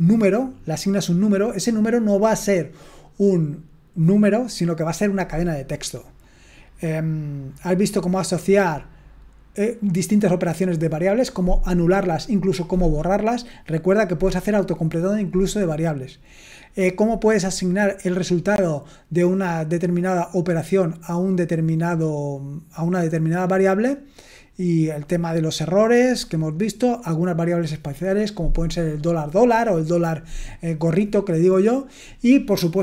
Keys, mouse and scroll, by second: 6.1-7.5 scroll up 1, 7.5-11.3 scroll up 1, 11.3-13.4 scroll up 1, 13.4-16.0 scroll up 1, 16.0-16.7 scroll up 1, 16.7-17.6 scroll up 1, 17.6-21.8 scroll up 1, 21.8-22.7 scroll up 1, 22.7-23.3 scroll up 1, 23.3-24.7 scroll up 1, 24.7-25.5 scroll up 1, 25.5-27.3 scroll up 1, 27.3-31.2 scroll up 1, 31.2-32.8 scroll up 1.